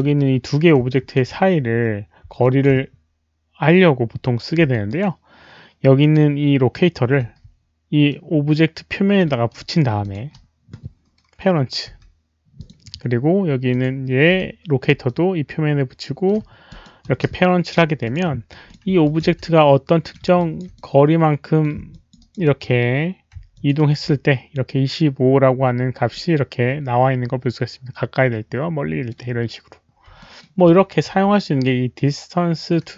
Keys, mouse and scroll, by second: 0.0 alt+click, 0.0 alt+right click, 0.0 w, 0.3 alt+click, 0.3 alt+right click, 0.3 w, 1.0 alt+click, 2.2 middle click, 2.2 alt+right click, 2.2 w, 2.4 alt+click, 4.6 w, 4.8 right click, 4.9 alt+click, 4.9 middle click, 4.9 w, 6.0 alt+click, 7.1 alt+click, 7.1 right click, 7.1 middle click, 7.1 w, 8.1-9.2 middle drag, 10.0 shift+click, 11.0 right click, 11.9 p, 12.5 click, 13.5-14.8 typing, 13.7 click, 13.8 middle click, 13.8 right click, 14.3 shift+click, 14.3 middle click, 14.3 right click, 15.0-16.2 middle drag, 16.6 shift+click, 17.8 p, 18.0 shift+click, 18.6 shift+click, 19.0 alt+shift+click, 19.2-20.6 typing, 19.4-20.1 middle drag, 20.3 alt+shift+drag, 20.7-21.6 middle drag, 21.9 alt+shift+drag, 22.2 alt+right drag, 22.4 alt+middle drag, 23.5 alt+click, 23.7 alt+right drag, 26.1-29.1 alt+middle drag, 29.1 alt+click, 29.1 w, 30.0 alt+click, 30.2 alt+middle drag, 30.6 alt+click, 31.0 q, 32.8 alt+click, 32.8 alt+middle click, 32.8 q.